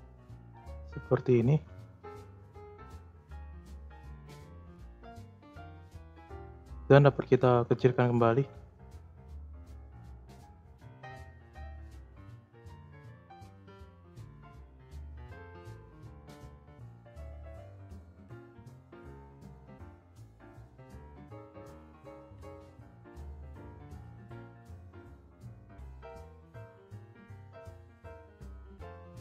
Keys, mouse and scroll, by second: 0.1-1.6 drag, 1.6 space, 3.2 space, 3.7-4.7 drag, 4.7 s, 7.3-8.3 drag, 8.3 space, 10.4 space, 11.6-13.4 drag, 13.4-13.8 scroll down 2, 14.2 middle click, 14.7-16.0 scroll up 3, 16.5 click, 17.0 scroll down 2, 17.2 middle click, 17.5-18.7 scroll up 2, 18.7 click, 19.1-20.1 scroll up 9, 20.1 click, 21.3 click, 23.0 scroll down 1, 23.2-23.7 middle drag, 23.7 scroll down 2, 24.7 click, 25.2-26.1 scroll up 3, 25.2 middle drag, 26.5 click, 28.0 click, 28.5 click.